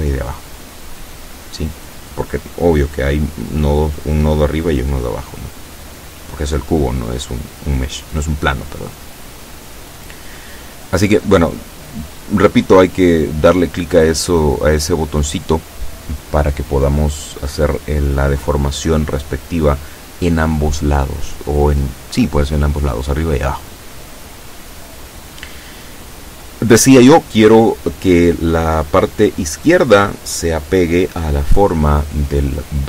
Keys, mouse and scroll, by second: 15.5 KP_7, 31.8 a.